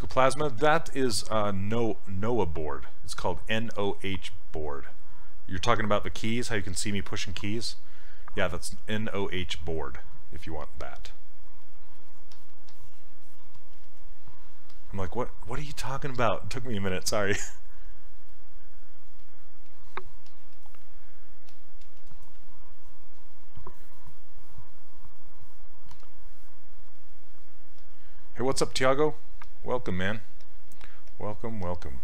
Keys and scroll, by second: 27.8 s.